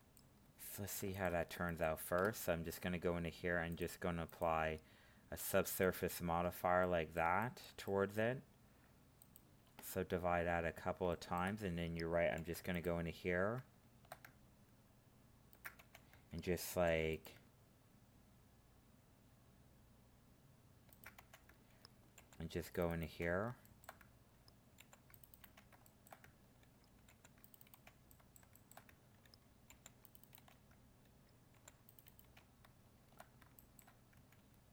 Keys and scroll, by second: 12.3 ctrl+r, 16.7 ctrl+r, 22.2 ctrl+r.